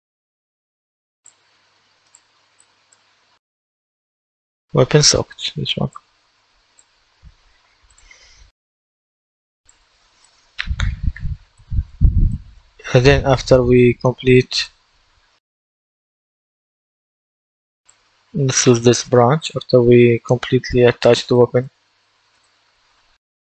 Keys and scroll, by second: 18.7-19.7 typing.